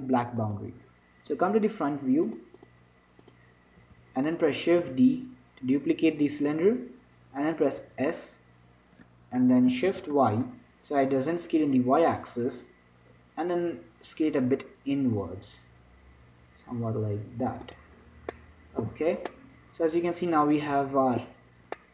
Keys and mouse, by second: 0.7-2.5 right drag, 2.5 click, 3.6-5.1 drag, 4.1 z, 5.7 shift+d, 8.1 s, 18.6-20.1 middle drag, 19.5 z, 20.3-21.9 middle drag.